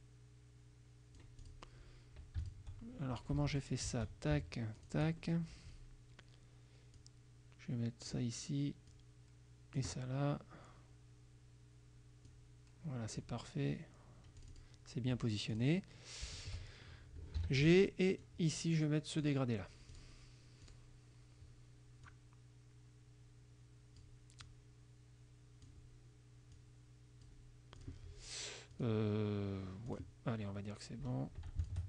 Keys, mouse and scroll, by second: 2.5 shift+click, 3.5 F2, 4.0 shift+click, 4.9 shift+click, 5.3 shift+click, 7.1-8.4 drag, 9.0 click, 12.4 click, 14.5 click, 15.6 click, 16.4 shift+click, 17.4 g, 18.3-19.5 drag, 20.0 click, 20.7 click, 22.1-24.3 drag, 24.5-25.9 drag, 26.6 click, 27.9 click, 28.8 click, 30.0 click, 31.7 shift+click.